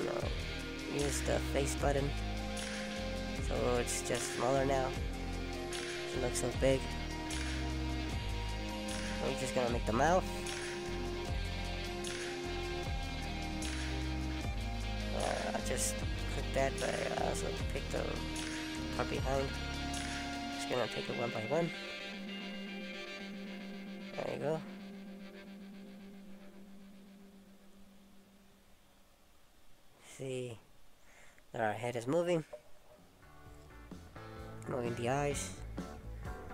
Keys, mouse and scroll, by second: 0.4 click, 1.4-2.1 scroll up 1, 2.1 middle click, 4.9 click, 6.2 click, 7.8 middle click, 10.1 scroll up 1, 10.8 middle click, 11.6 click, 12.3 shift+click, 13.1 click, 14.0 click, 14.1 middle click, 16.7 shift+middle click, 18.5-21.8 alt+shift+r, 22.2-22.6 scroll down 1, 22.6 middle click, 24.7 shift+s, 27.1 alt+s.